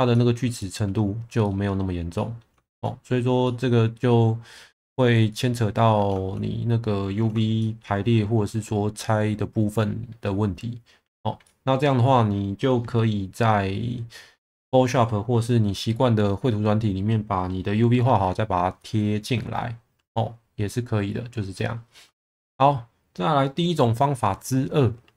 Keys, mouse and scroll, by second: 0.1 middle drag, 0.6 shift+middle drag, 1.4 middle click, 2.1 middle drag, 2.6 shift+middle drag, 3.4-3.9 middle drag, 5.3 middle click, 7.6 shift+middle drag, 11.4-11.7 middle drag, 18.8 middle click, 22.2 shift+middle click.